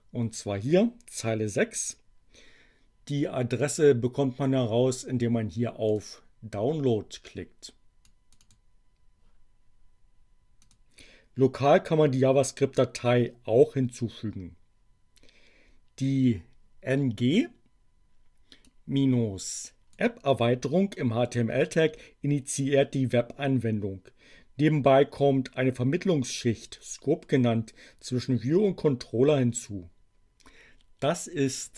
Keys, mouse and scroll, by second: 3.7 click, 5.8 click, 8.0 click, 10.6 click, 18.6-20.1 drag, 31.4 click.